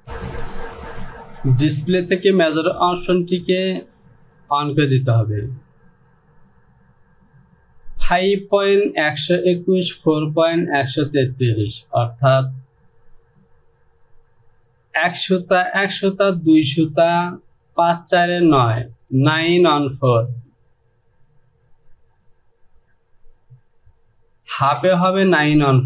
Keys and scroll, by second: 24.7 j.